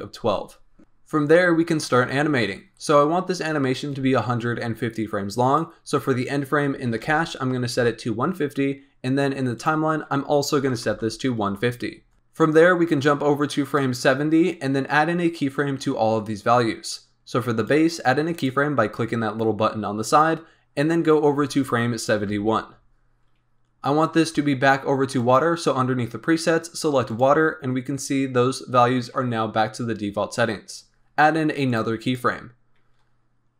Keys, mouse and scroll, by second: 5.4-8.4 drag, 9.5-12.1 drag, 12.1-13.3 scroll up 3, 13.3 click, 17.7 click, 18.4 click, 20.2 click, 22.1 Right, 25.1-28.1 drag, 31.8 click, 32.1 click.